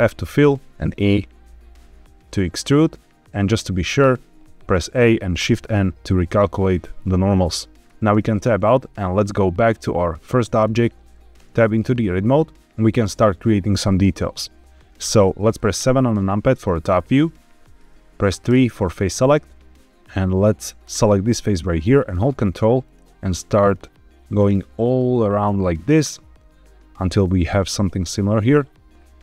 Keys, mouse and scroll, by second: 0.3 e, 2.4 click, 3.9 a, 5.3 shift+n, 6.9-7.8 scroll down 3, 8.0 Tab, 10.4 click, 11.3 Tab, 15.7 KP_7, 18.4 3, 20.7 click, 22.2 ctrl+click, 22.8 ctrl+click, 23.5 ctrl+click, 24.3 ctrl+click, 25.2 ctrl+click, 25.9 ctrl+click.